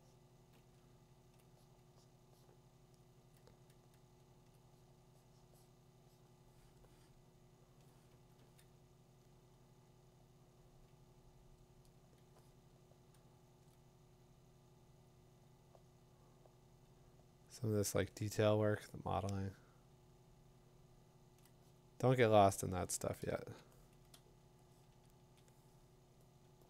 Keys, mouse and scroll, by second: 0.9 ], 1.3 click, 4.5 click, 7.7 click, 8.4 2, 13.6 click, 18.7 click, 21.4 click, 25.3-26.3 click, 26.3 click.